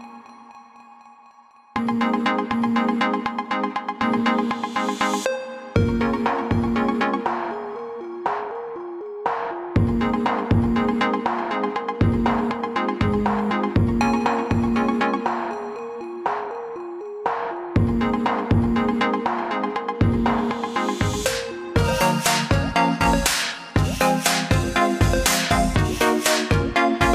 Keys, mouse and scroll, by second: 4.7 shift+click, 5.7 click, 14.8-15.4 scroll down 1, 16.0 scroll down 1, 18.1-18.6 scroll down 2, 19.0-19.9 scroll up 1, 19.9 click, 20.8 scroll up 1, 22.0 click, 22.7-24.0 scroll down 1, 24.0 click.